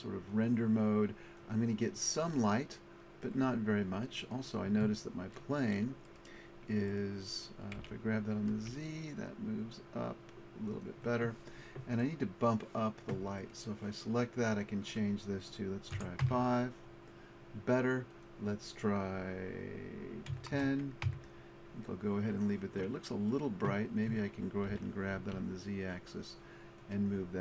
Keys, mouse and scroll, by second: 0.1 click, 2.2 middle click, 7.8 g, 8.8-10.7 middle drag, 11.0 click, 15.3 middle click, 18.2-20.1 drag, 23.5-25.8 drag, 24.7 g, 27.0-27.4 drag.